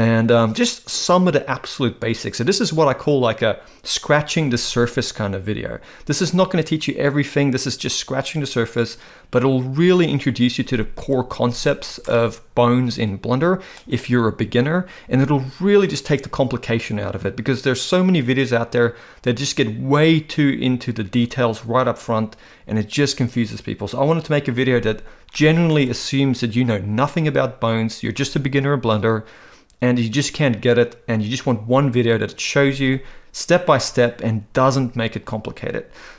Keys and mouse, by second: 12.1-13.7 middle drag, 25.3 middle click.